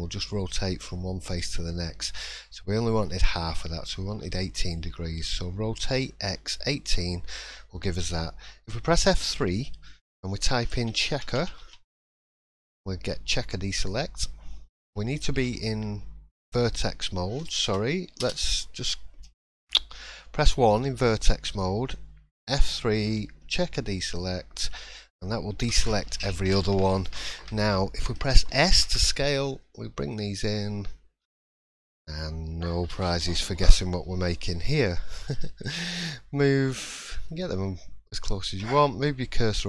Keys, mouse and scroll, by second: 17.6 BackSpace, 19.7 1, 36.7 middle click, 37.3-37.8 scroll up 1.